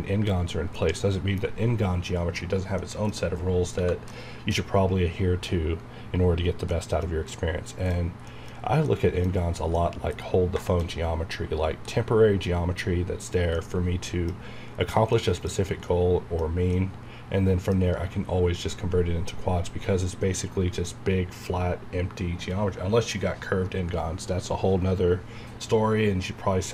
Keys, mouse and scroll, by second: 0.5 scroll down 1, 0.7-3.2 middle drag, 3.2 scroll up 1, 3.8 Tab, 4.1-6.4 middle drag, 6.4 scroll down 1, 6.7-8.3 middle drag, 8.6 scroll up 1, 8.8 middle click, 8.9 middle click, 9.3 scroll up 1, 9.7 middle click, 10.2 scroll down 1, 10.6 shift+middle click, 10.8 shift+scroll up 1, 11.4 scroll down 1, 11.9-13.5 middle drag, 13.7 scroll down 1, 15.1-17.7 middle drag, 17.7-18.0 scroll down 1.